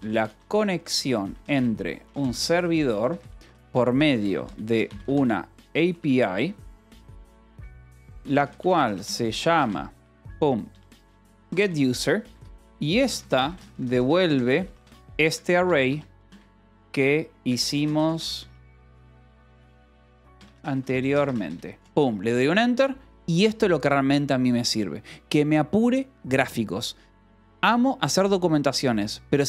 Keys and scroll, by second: 0.0-21.6 typing.